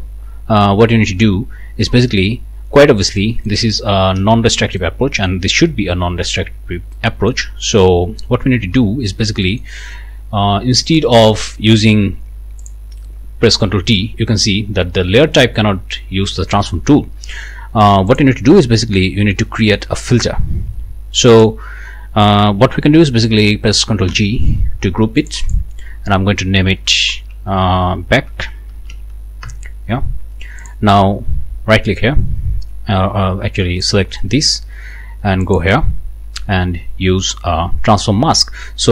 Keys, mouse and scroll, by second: 3.2 click, 4.1 ctrl+s, 4.8-5.4 ctrl+scroll up 1, 6.9-7.3 scroll up 1, 7.3 click, 8.1 click, 8.5-9.0 scroll up 1, 9.4-9.8 scroll up 1, 10.8-11.1 scroll up 1, 12.6 click, 13.5 ctrl+t, 18.1 click, 21.3 click, 24.1 ctrl+g, 25.2 click, 28.0-29.4 typing, 29.4 shift+Return, 30.6 click, 33.8 click, 35.4 click.